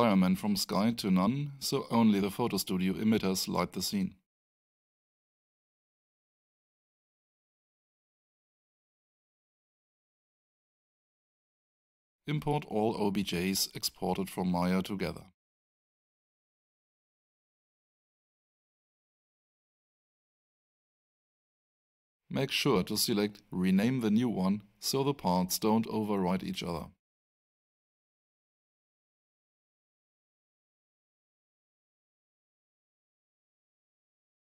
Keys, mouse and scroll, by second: 4.1 click, 6.6 alt+click, 11.5 click, 15.1 click, 18.4 Return, 25.1 click, 32.3 click.